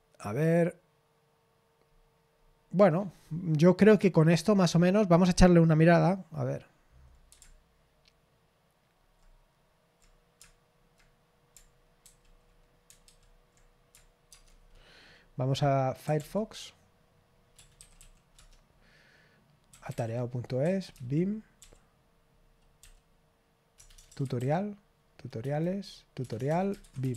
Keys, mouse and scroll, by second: 1.8-7.4 scroll down 1, 7.4-9.2 scroll down 1, 9.2-10.4 scroll down 1, 10.4-11.0 scroll down 1, 12.0 super+f, 13.0 super+f, 14.3 alt+space, 15.8-21.6 typing, 20.6 Right, 22.8-24.9 typing, 25.4 Tab, 26.2-27.1 typing.